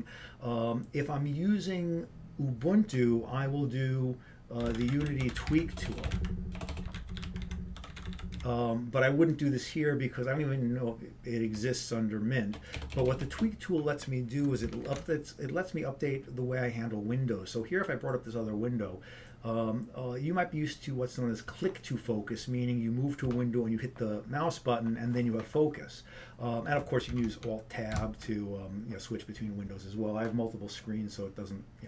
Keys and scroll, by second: 7.8-9.6 typing, 14.0 BackSpace, 15.8 ctrl+alt+t, 28.5 alt+Tab.